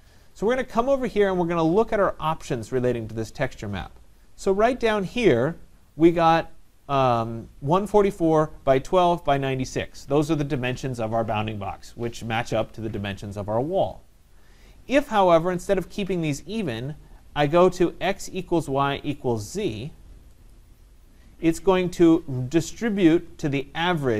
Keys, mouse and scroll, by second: 20.5 click.